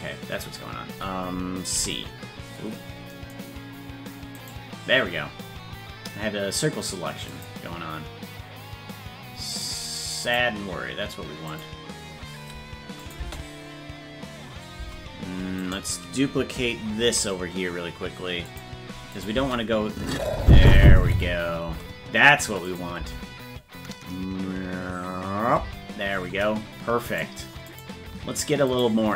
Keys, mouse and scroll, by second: 7.3 click, 10.3 click, 11.5 click, 13.0 click, 13.2 space, 15.6 right click, 15.6 space, 17.0 shift+d, 19.2 click, 19.4 space, 22.7 click, 23.0 space, 27.2 right click, 28.8 right click.